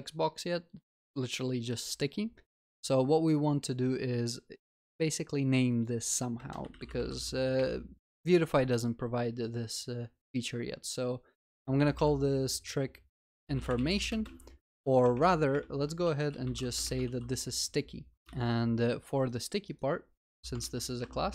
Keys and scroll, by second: 15.0 ctrl+BackSpace, 17.0 ctrl+BackSpace, 17.3 ctrl+s, 18.5 ctrl+c, 20.6 ctrl+v.